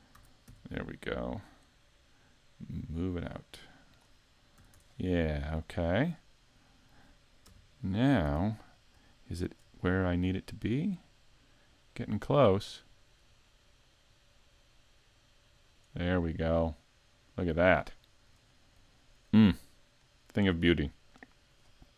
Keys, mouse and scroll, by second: 0.2 a, 0.5 b, 2.4 click, 4.6 a, 4.8 Tab, 5.1-5.7 scroll down 2, 6.1 middle click, 7.5 KP_Decimal, 8.3 z, 8.6-9.2 scroll up 4, 9.2 shift+middle click, 9.8 middle click, 11.9 click, 16.0-16.5 scroll down 4, 16.5 middle click, 18.0 shift+middle click, 18.5-19.1 scroll down 2, 19.0 shift+middle click, 19.5 middle click, 19.6 scroll down 1.